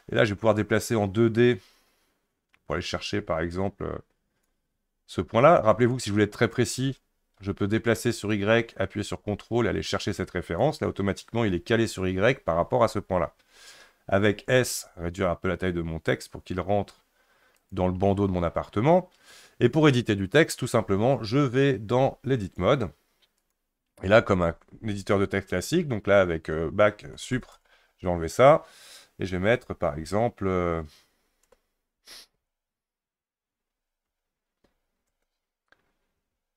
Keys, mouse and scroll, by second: 0.2 click, 5.9 click, 8.3 click, 14.7 s, 22.4-25.6 drag, 27.0 BackSpace, 27.2 BackSpace, 27.3 BackSpace, 27.5 BackSpace, 29.6 shift+a, 31.4-36.5 typing.